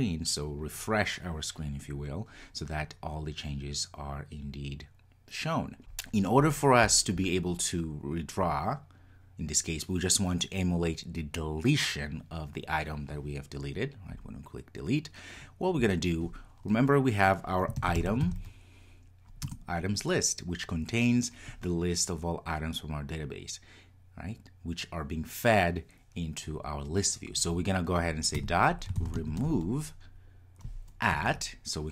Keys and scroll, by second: 19.5 Return.